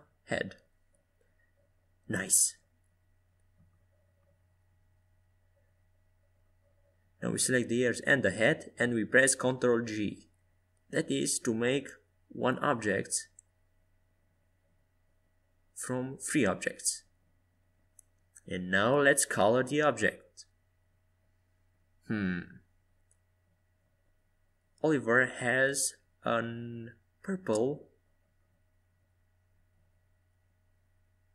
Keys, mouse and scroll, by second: 0.1 KP_5, 0.7 KP_1, 1.6 KP_3, 2.2 KP_5, 3.9 middle click, 6.4-10.4 right drag, 10.5 ctrl+j, 12.3-14.4 right drag, 13.6 g, 15.4 right click, 15.8-18.5 middle drag, 17.3 g, 21.5-25.8 drag.